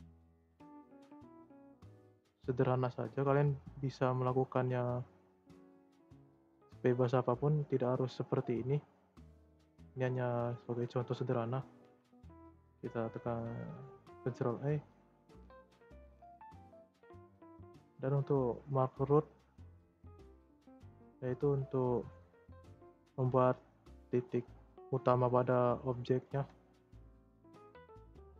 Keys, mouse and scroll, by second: 0.0 e, 5.2-6.5 middle drag, 6.5 shift+scroll up 1, 6.5 shift+middle click, 7.1-7.7 scroll down 3, 7.7-8.3 scroll up 4, 8.3 scroll down 2, 8.5 middle click, 8.7-9.9 scroll up 2, 9.9-11.8 middle drag, 11.8 ctrl+a, 14.4 scroll up 1, 14.5 middle click, 15.0 scroll up 1, 15.1 shift+middle click, 15.6 click, 16.0-17.2 middle drag, 17.2 click, 17.9-19.4 scroll down 2, 19.4-21.3 scroll up 5, 21.3 scroll up 1, 21.4 click, 22.3 shift+middle click, 22.9-25.1 scroll up 2, 25.1-25.8 scroll down 3, 25.8 scroll down 1, 25.8-26.2 middle drag, 26.2 Tab, 26.7 Tab, 27.0 middle click, 27.4 scroll up 2, 28.1 click.